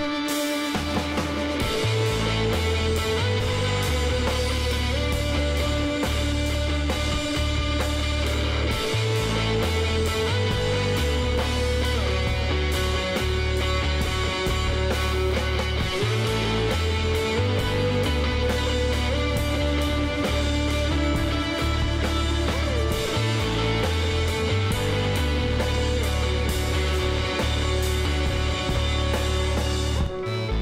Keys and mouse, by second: 3.7 click, 5.4 click, 6.0-8.1 middle drag, 8.1-11.1 drag, 10.7 x, 12.6-14.5 middle drag, 14.0 Tab, 17.8 Tab, 19.8-23.5 drag, 22.6 x, 24.6 ctrl+z, 25.6 Tab, 27.0 Tab, 28.3-30.6 middle drag.